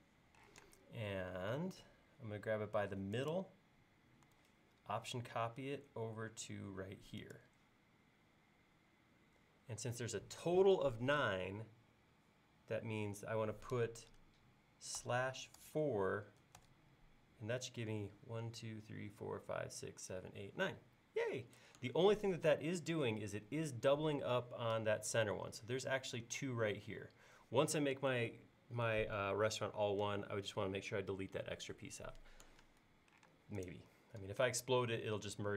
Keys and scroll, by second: 0.5 m, 15.0-16.1 typing, 16.6 Return, 33.3 space.